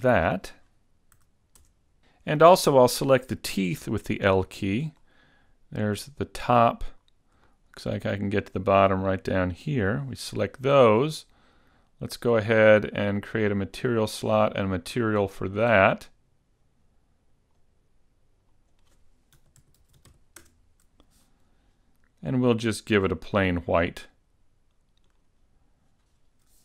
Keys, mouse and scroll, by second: 0.1 click, 0.1 scroll up 1, 1.3 a, 3.9 l, 5.1 middle click, 7.1 scroll up 2, 7.6 shift+middle click, 9.8 l, 10.4 scroll down 2, 12.4 click, 13.9 click, 15.0 click, 17.5 click, 18.6 click, 19.9 e, 22.5-23.1 scroll down 3, 23.1-23.5 scroll down 4, 23.8-25.2 scroll up 3, 25.2 click.